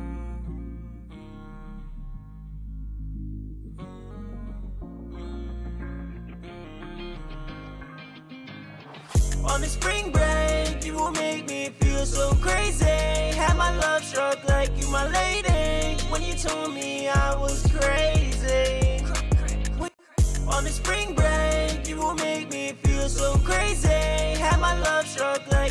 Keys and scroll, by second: 0.7 super+Tab, 12.7 super+Tab, 13.9 super+`, 19.0-19.7 typing.